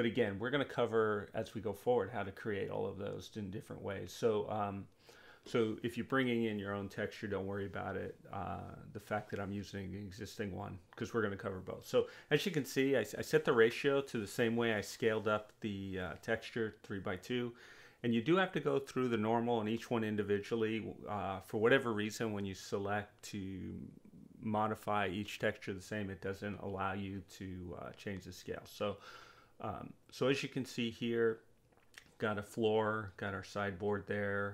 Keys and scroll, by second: 0.2 Return, 5.6 2, 7.3 4, 7.6 Return, 11.2 space.